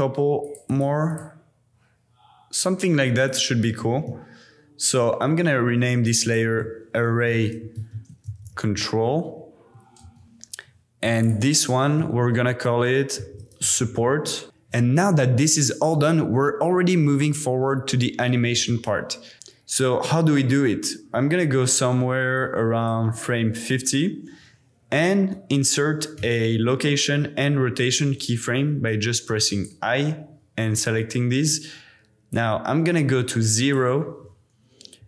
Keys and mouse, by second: 0.4 click, 0.6 click, 1.1 click, 3.7 g, 3.8 z, 4.8 shift+click, 6.0 click, 6.2-10.0 drag, 7.6 r, 11.2-14.5 drag, 13.8 p, 22.3 click, 26.2 i, 32.3-33.7 drag, 35.0 g.